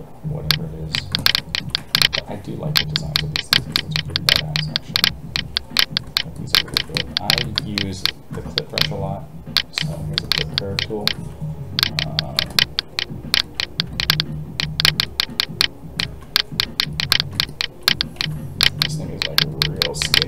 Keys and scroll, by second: 11.1 alt+a.